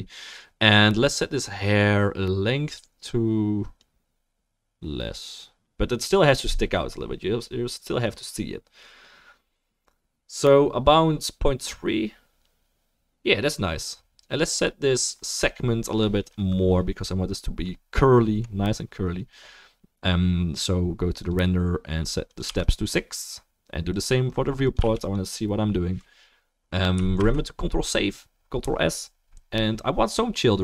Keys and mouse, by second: 11.7-30.6 middle drag, 11.7-30.6 right drag, 23.9-25.3 drag, 27.2 ctrl+s.